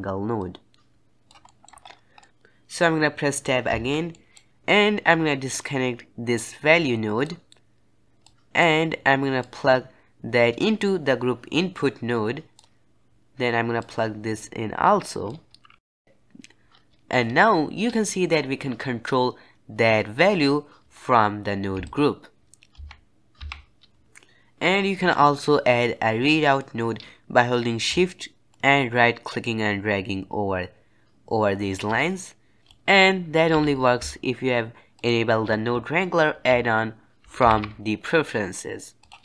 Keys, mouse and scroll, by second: 1.4-1.7 middle drag, 1.7-2.1 scroll up 5, 2.1 middle click, 3.6 Tab, 4.0 middle click, 4.5 click, 6.3 click, 8.1 click, 9.3 click, 13.7 click, 15.8 middle click, 15.8 click, 16.1 Tab, 21.8 shift+click, 22.7 Tab, 23.3 Tab, 28.4 shift+right click, 32.6 g, 33.5 g, 37.4 ctrl+alt+u.